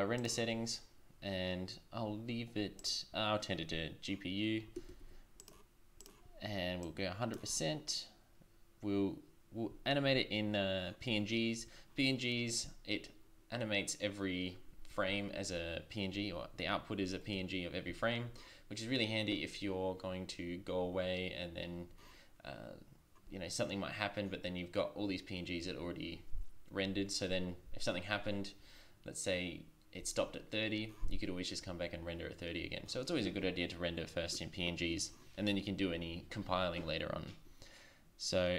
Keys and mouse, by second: 4.8 shift+z, 5.4-9.2 drag.